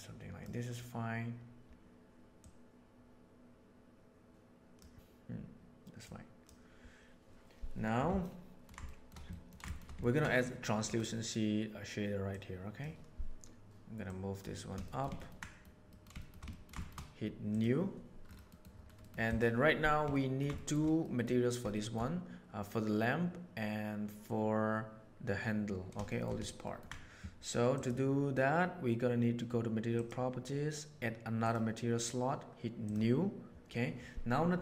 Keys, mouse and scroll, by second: 4.7-6.0 middle drag, 6.4-7.5 middle drag, 8.1-8.6 ctrl+middle drag, 8.8 shift+middle drag, 9.2 ctrl+middle click, 9.6 shift+middle drag, 9.9 ctrl+middle click, 12.2 click, 14.2 click, 14.8 shift+middle click, 15.1 ctrl+middle click, 15.3-15.6 middle drag, 15.8 middle click, 16.1 shift+middle drag, 16.4 ctrl+middle click, 16.7 shift+middle click, 17.4 click, 18.9 middle click, 20.0-20.3 ctrl+middle drag, 20.5 shift+middle drag, 20.9 middle click, 21.7 shift+middle click, 26.0 shift+middle drag, 26.6 ctrl+middle click, 27.7 click, 29.9 click, 32.8 click.